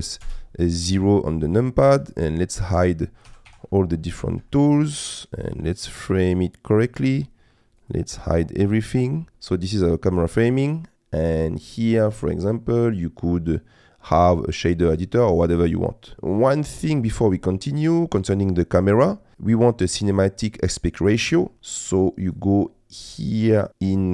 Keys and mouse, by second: 0.2 KP_0, 3.2 n, 3.5 t, 4.6-6.4 ctrl+middle drag, 6.4 ctrl+click, 7.8 click, 8.2 click, 11.6 click, 12.9-14.6 drag, 17.9-21.2 drag, 22.3 click, 23.1 click.